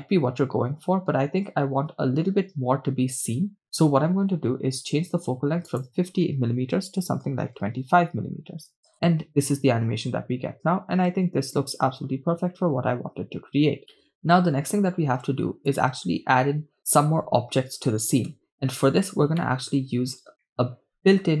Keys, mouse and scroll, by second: 3.7 shift+space, 5.3-5.7 scroll up 1, 6.3-8.2 drag, 8.9 shift+space, 15.2 shift+space, 15.8 click, 18.3 KP_0, 19.4-20.0 scroll down 1, 20.0 middle click, 20.9-21.4 shift+middle drag.